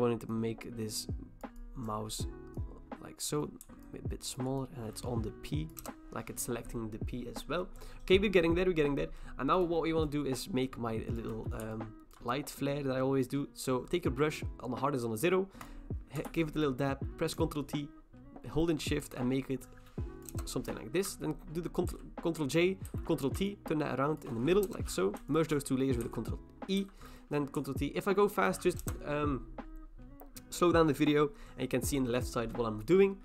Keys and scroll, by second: 5.8 Return, 16.3 ctrl+t, 20.3 Return, 21.9 ctrl+j, 22.9 ctrl+t, 24.6 Return, 26.0 ctrl+e, 26.8 ctrl+t, 28.8 Return.